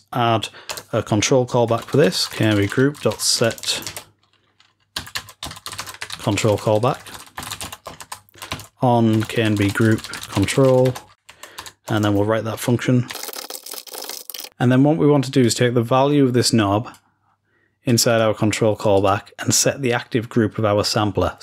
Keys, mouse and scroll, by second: 15.4-21.4 drag.